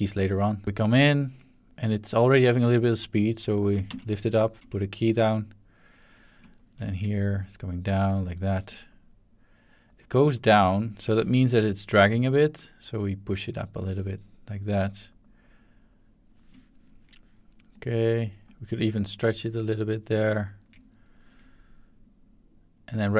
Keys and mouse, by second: 0.3-0.6 drag, 2.1-3.6 drag, 3.9 z, 5.2-6.0 drag, 7.3 click, 8.6-10.9 drag, 11.4 shift+middle drag, 11.5-11.9 ctrl+shift+drag, 12.9 click, 14.5-16.2 drag, 17.7 click, 19.0-20.1 drag, 22.0-23.0 drag.